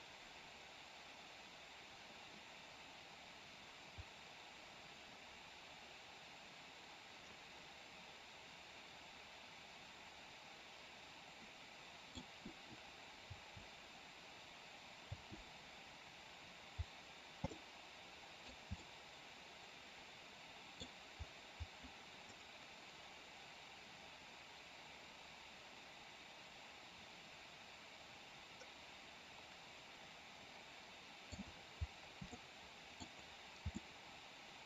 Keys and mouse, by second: 13.2 space, 15.1 space, 17.5-18.5 middle drag, 18.8-20.8 middle drag, 22.2-31.2 middle drag, 32.2-33.0 middle drag, 33.8-34.6 middle drag.